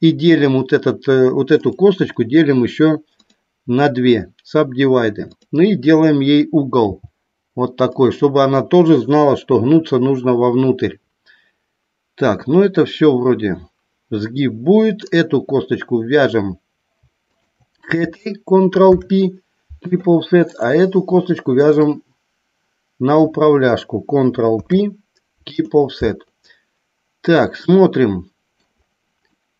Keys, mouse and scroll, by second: 5.3 click, 7.8 click, 14.9 click, 17.3 shift+click, 18.8 ctrl+p, 20.4 click, 21.5 shift+click, 24.4 ctrl+p, 27.6-28.7 middle drag, 29.3 middle click.